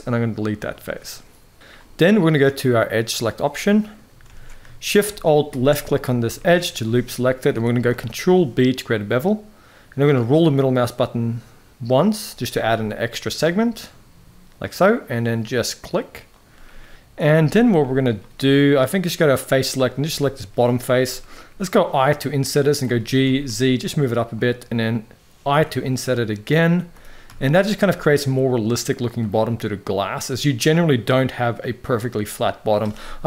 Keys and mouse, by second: 2.5 click, 3.5 middle drag, 4.0 alt+a, 5.2 alt+shift+click, 5.6 middle click, 6.1-6.9 shift+middle drag, 7.6 ctrl+b, 16.5-16.9 middle drag, 17.1 shift+middle click, 17.5 middle click, 19.0 click, 20.0-21.2 shift+middle drag, 21.2 i, 22.5 g, 25.2 i, 26.6 g, 27.8-28.9 middle drag.